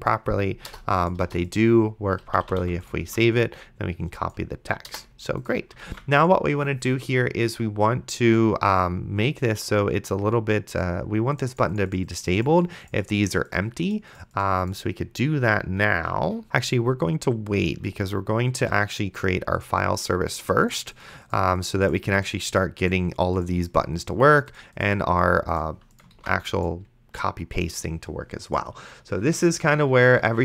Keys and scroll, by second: 0.7 BackSpace, 2.3 d, 4.9 BackSpace, 6.1 ctrl+s, 26.4 ctrl+s.